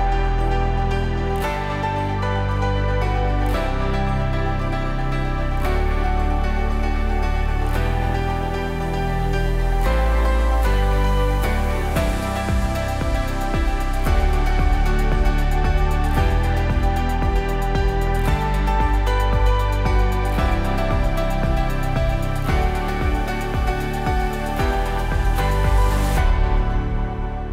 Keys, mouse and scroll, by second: 3.0 click, 8.7 ctrl+c, 9.4 click, 17.2 ctrl+v, 17.6-27.5 drag, 23.6-24.4 drag, 26.4-27.5 drag.